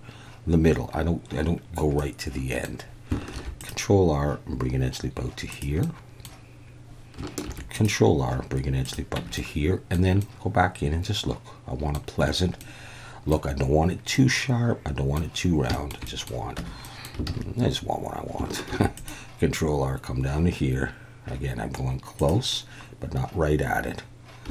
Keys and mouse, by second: 2.0 middle click, 3.3 ctrl+r, 5.5 click, 5.9 middle click, 7.4 ctrl+r, 8.8 click, 9.2 Tab, 9.3-9.9 middle drag, 10.3-11.9 middle drag, 12.6-13.3 middle drag, 14.1-15.1 middle drag, 15.8 shift+middle click, 16.1 click, 16.6 Tab, 16.8 click, 17.3 alt+a, 18.7 ctrl+r, 22.2 click.